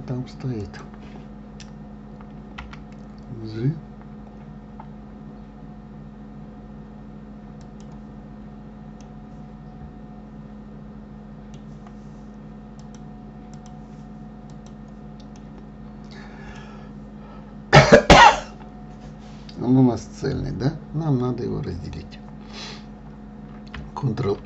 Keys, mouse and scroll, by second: 1.0 click, 3.0 g, 9.4-12.4 middle drag, 13.2-15.0 drag, 15.7-18.8 middle drag.